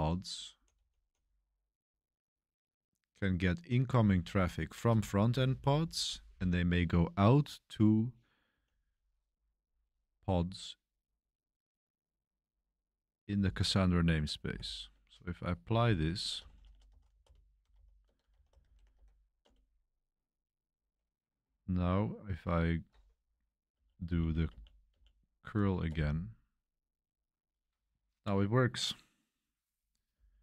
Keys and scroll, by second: 0.0-1.2 typing, 2.8-3.5 typing, 5.7-6.1 typing, 8.4-12.2 typing, 13.7-19.4 typing, 23.6 Page_Up, 24.0 Page_Up, 24.4 Page_Up, 24.8 Page_Up, 25.8 Return, 30.1 Page_Up.